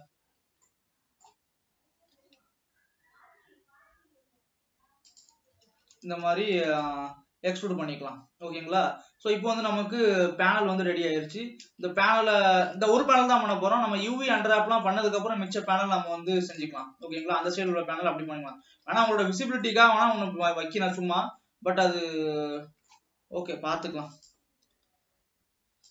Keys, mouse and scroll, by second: 0.2 scroll up 1, 0.5-1.0 scroll down 1, 1.0 middle click, 1.8-2.4 scroll up 1, 2.4 e, 8.0 alt+a, 8.4 ctrl+s, 9.3-9.7 scroll down 3, 9.8-13.4 middle drag, 13.4-13.7 shift+scroll down 2, 13.7 shift+middle click, 14.5 scroll down 1, 15.0 middle click, 15.9 scroll up 3, 16.8 ctrl+s, 16.9-18.5 shift+middle drag, 18.5 shift+scroll down 1, 19.2 alt+a, 19.5-19.9 scroll up 3, 19.9-21.0 shift+middle drag, 21.0-21.4 scroll up 3, 21.6-25.9 middle drag.